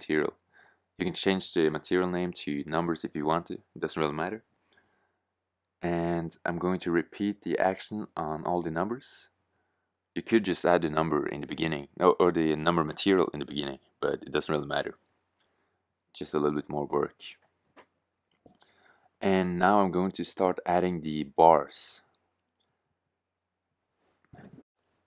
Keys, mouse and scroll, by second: 17.9 shift+z.